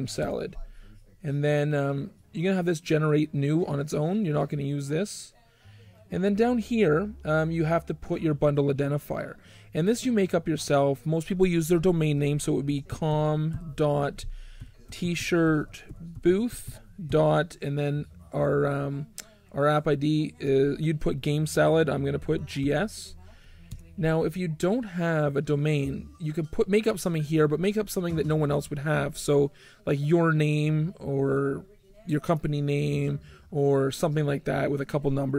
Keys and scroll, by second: 0.2 g, 12.4-17.5 typing, 22.0-23.7 typing.